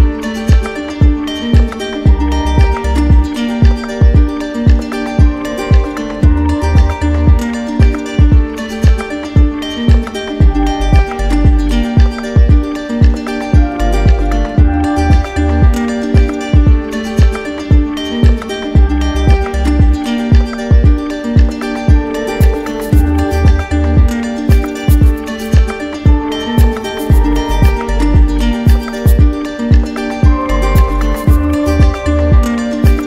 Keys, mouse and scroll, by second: 0.3 ctrl+d, 1.2 ctrl+d, 3.4 right click, 3.9 right click, 4.0 alt+right click, 4.4 alt+right click, 9.7-10.8 drag, 19.6-20.6 drag, 22.1-23.1 drag, 23.9 click, 24.6 alt+click, 25.2 alt+click, 27.3 click.